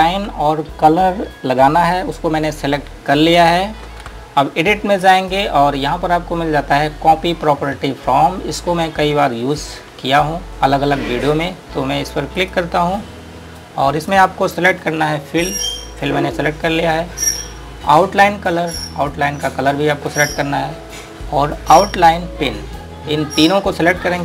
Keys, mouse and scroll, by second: 3.4 click, 5.5 click, 12.6 click, 20.2 click, 23.6 click.